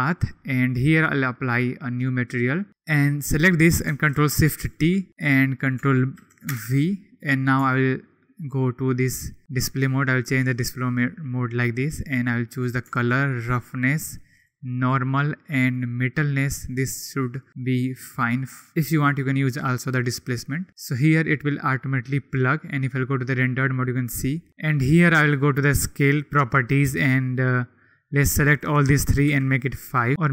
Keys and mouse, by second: 4.6 ctrl+shift+t, 26.8 click, 28.3-29.5 drag, 30.1 click.